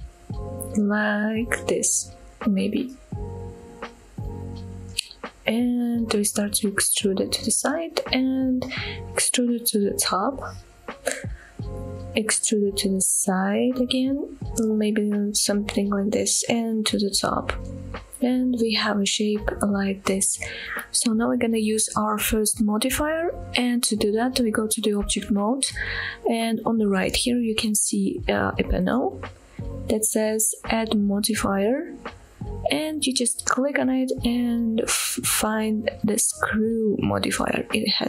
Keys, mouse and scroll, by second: 4.0 click, 4.3-4.7 scroll up 1, 4.7-5.1 scroll down 1, 5.1 e, 6.2 x, 7.6 click, 8.6 e, 9.1 z, 10.7 click, 11.0 scroll up 1, 11.4 shift+middle click, 12.1 e, 15.0 click, 15.2 e, 16.1 z, 16.9 click, 17.1-18.0 scroll down 2, 23.4 Tab, 33.6-38.0 drag.